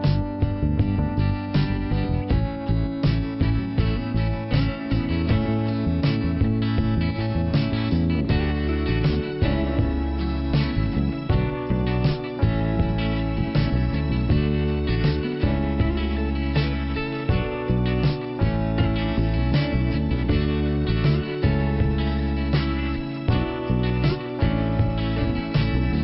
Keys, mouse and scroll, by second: 0.6 click, 2.1 middle click, 4.2 click, 5.5 click, 6.0 scroll up 1, 6.7 click, 7.7 click, 9.4 scroll down 1, 10.3 scroll up 1, 12.0 click, 13.0 click, 14.9-15.3 scroll down 1, 15.3 click, 16.1-16.5 scroll up 1, 17.2 click, 18.4 click, 20.3 click, 21.1 click, 21.9-22.7 scroll down 1, 22.7-23.1 scroll up 1, 23.2 middle click, 23.6 scroll up 1, 24.9 middle click.